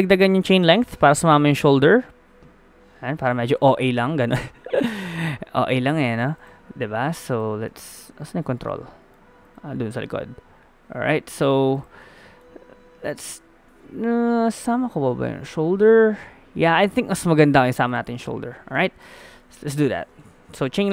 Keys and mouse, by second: 1.0 middle click, 1.9 click, 2.2-3.2 middle drag, 5.8 g, 7.7-10.0 middle drag, 10.0-11.2 drag, 10.0 g, 12.0-14.4 drag, 12.4 g, 18.8 a, 19.2 a, 20.0 alt+g, 20.2 alt+r, 20.3 alt+w.